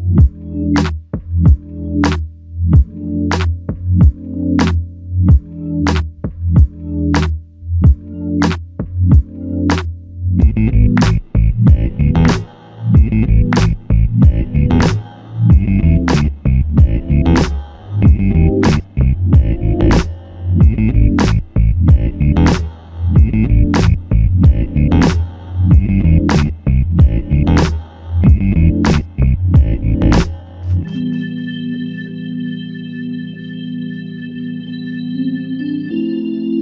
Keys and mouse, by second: 33.3 alt+click.